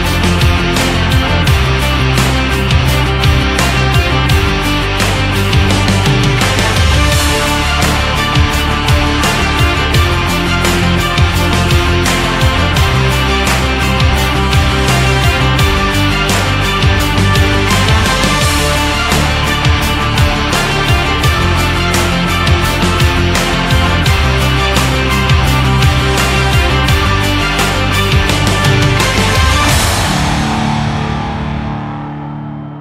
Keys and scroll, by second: 24.7 shift+Down, 28.0 Down, 29.6 Down, 31.2 Down.